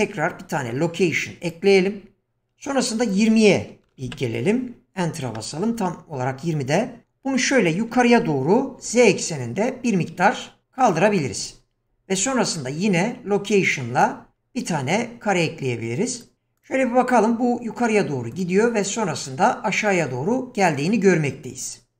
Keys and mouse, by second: 0.6 i, 3.2-5.4 drag, 7.9 g, 12.2 i, 16.1 click, 16.6 click, 18.3 click, 20.6 click.